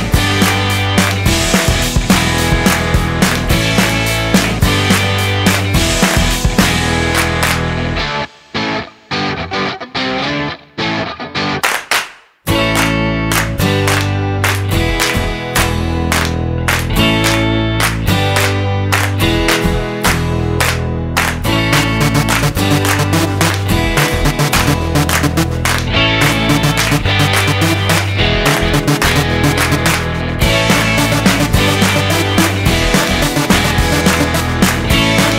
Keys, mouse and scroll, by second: 0.9 ctrl+alt+b, 7.0 click.